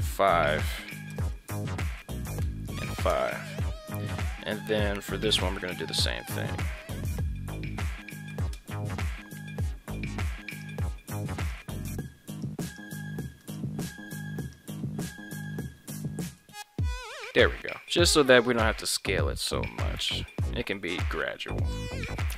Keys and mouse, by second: 11.4 right click, 11.7 ctrl+Tab, 12.7 right click, 13.1 ctrl+Tab, 13.8 right click, 14.2 ctrl+Tab, 14.6 right click, 15.4 s, 15.7 x, 21.6 right click.